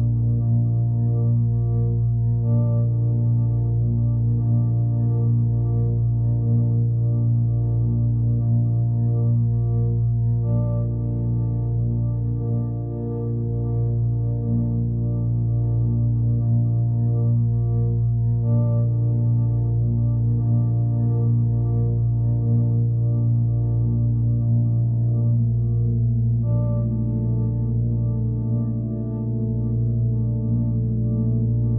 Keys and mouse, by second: 0.5 click, 1.1 click, 2.3 click, 3.6 click, 3.9 click, 4.5 alt+middle drag, 4.7-5.2 alt+middle drag, 6.2 click, 8.3-9.2 alt+middle drag, 11.4-23.1 drag, 24.6-26.1 alt+middle drag, 26.2-27.0 alt+middle drag, 27.3-28.1 alt+middle drag, 28.3 middle drag, 28.8-29.2 alt+middle drag, 30.7-31.7 drag.